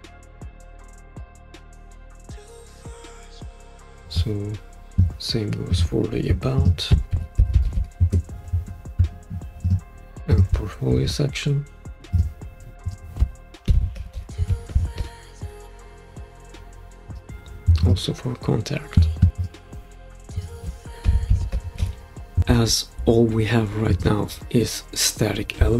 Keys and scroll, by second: 6.9-8.3 typing, 10.1 typing, 13.4-15.5 typing, 20.8-22.4 typing.